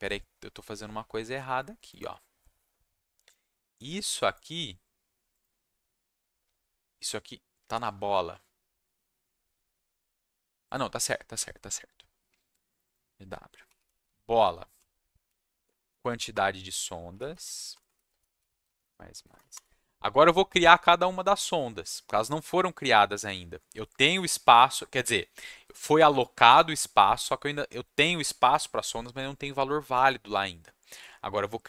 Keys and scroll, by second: 13.4-15.4 typing, 15.6 Down, 15.9 Down, 16.0 Down, 16.3 Return, 17.1-19.4 typing, 19.5 Return.